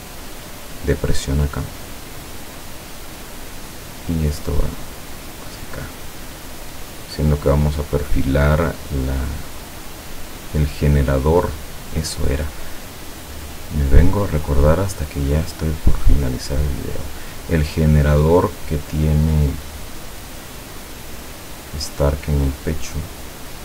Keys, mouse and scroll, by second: 1.4 click, 3.4 click, 5.7 click, 6.7 click, 8.7-9.7 drag, 11.4 click, 12.2-14.1 drag, 16.0 click, 18.5 click.